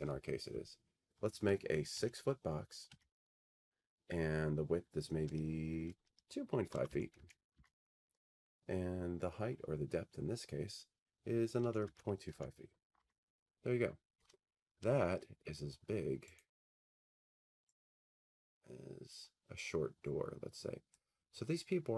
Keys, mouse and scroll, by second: 2.0 6, 2.9 Tab, 6.5-7.7 typing, 11.4-12.8 typing, 13.0 Tab, 16.6 right click, 20.9 click.